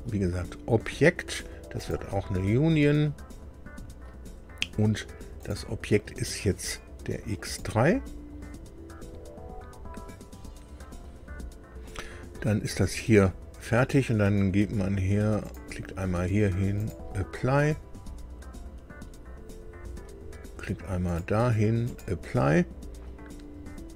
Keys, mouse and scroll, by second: 1.8 click, 5.4 click, 7.4 click, 15.4 click, 16.8 click, 21.0 click, 21.8 click.